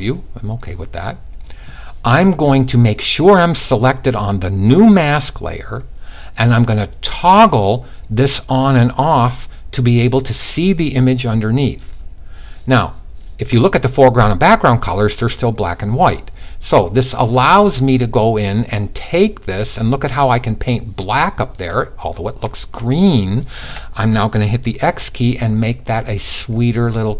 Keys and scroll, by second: 24.3 x.